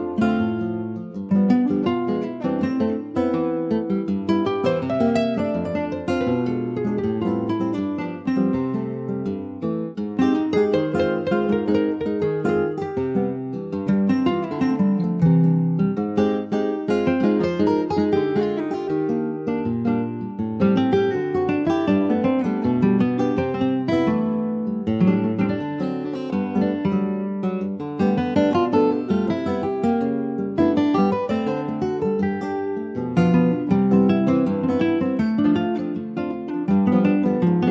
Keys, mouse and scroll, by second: 0.5 ctrl+s, 0.6 click, 0.8 scroll down 2, 1.1 middle click, 1.4-1.7 scroll up 2, 1.8 ctrl+s, 1.9 click, 2.9 click, 3.3 shift+middle click, 3.4 scroll up 3, 4.2 ctrl+s, 4.4 click, 5.9 click, 6.8 ctrl+s, 7.1 click, 8.1 scroll down 3, 8.3 click, 8.7 a, 10.4 ctrl+j, 11.6 middle click, 12.1 ctrl+s, 12.2 click, 12.4-13.9 right drag, 13.9 click, 14.7 click, 15.0 click, 15.5 click, 16.0 alt+middle click, 16.5 alt+middle click, 17.2 click, 18.7 ctrl+click, 19.0 scroll down 3, 19.2 shift+middle click, 19.7 click, 20.0-20.4 scroll up 2, 20.4 ctrl+a, 21.9 shift+d, 23.5 click, 24.7 alt+z, 25.1 middle click, 25.9 click, 27.8 click, 28.2 alt+x, 29.1 click, 29.7 ctrl+s, 30.2-31.8 middle drag, 31.8 ctrl+s, 32.2 click, 32.6 Tab, 33.5 click, 34.3 shift+middle click, 34.6 shift+scroll up 1, 34.8 middle click, 35.1 Tab, 36.1 Tab, 36.4 scroll up 3, 36.7 shift+middle click, 37.1 scroll up 1.